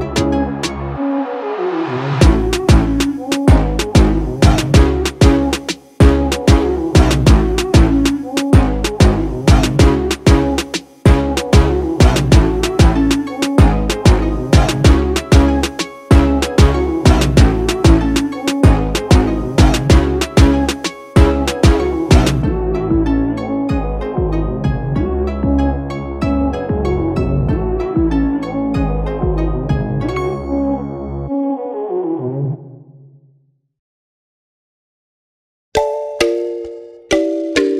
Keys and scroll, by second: 0.2 a, 0.7 d, 3.5 3, 3.7 4, 3.8 5, 4.3 Return, 7.0-7.9 typing, 9.3 w, 12.3-15.0 typing, 16.0 a.